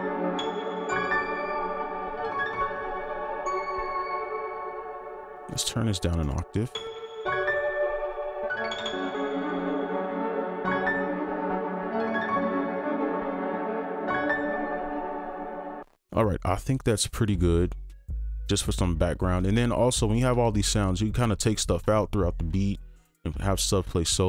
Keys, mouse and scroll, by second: 4.1 space, 5.0 ctrl+a, 6.0 scroll down 1, 8.0 space, 11.4 right click, 14.9 space, 15.8 double click.